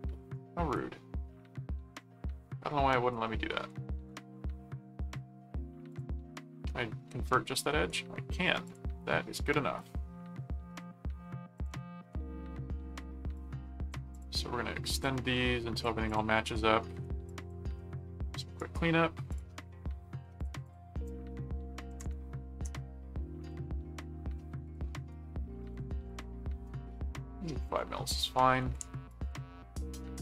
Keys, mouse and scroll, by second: 0.8-3.0 middle drag, 3.2 middle click, 3.9 ctrl+5, 4.8 ctrl+4, 5.9 click, 6.7 right click, 7.7 right click, 8.6 click, 11.5 click, 13.3 click, 14.1 click, 15.0 click, 16.1 click, 16.6 right click, 17.2 click, 18.5 right click, 19.3 click, 20.4 click, 23.4 ctrl+click, 24.3 ctrl+alt+click, 24.5 ctrl+alt+q, 25.1 right click, 25.7 click, 29.1 ctrl+click, 29.7 ctrl+alt+click.